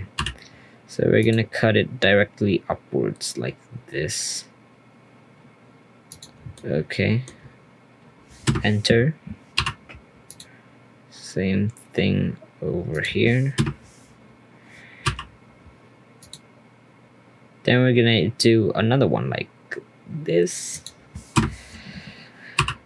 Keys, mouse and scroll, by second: 0.1 k, 6.5-9.5 shift+middle drag, 9.5 k, 15.0 k, 22.5 k.